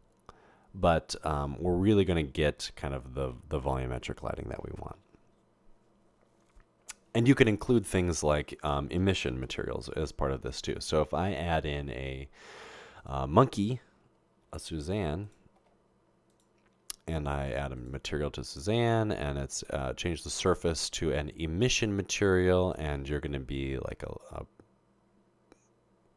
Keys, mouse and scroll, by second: 9.4 a, 15.3 typing, 18.5-19.2 drag, 20.1 click, 22.6 click, 23.6-26.1 drag.